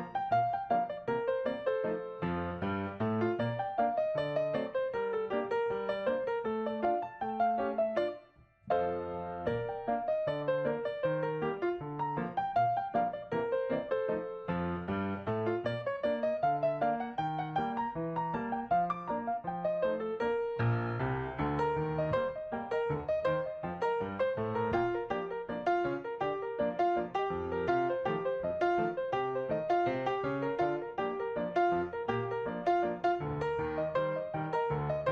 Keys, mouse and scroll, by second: 0.5 double click, 1.2-1.5 typing, 2.3 Return, 6.0-6.4 typing, 9.6 right click, 12.2 right click, 14.2 right click, 23.0-23.4 typing, 24.2 Return, 30.0 right click.